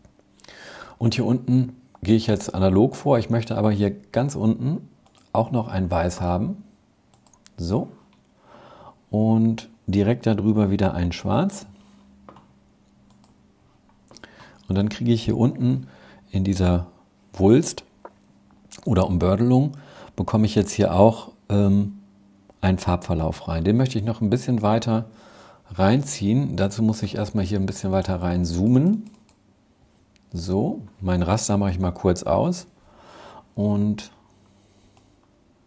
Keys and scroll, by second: 31.3 super+'.